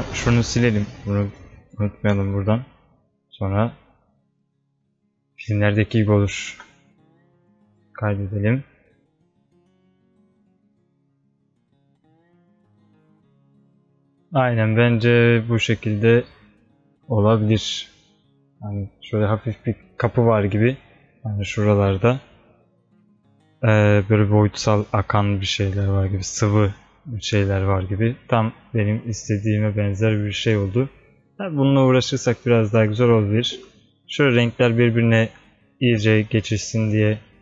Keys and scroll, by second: 6.6 ctrl+s.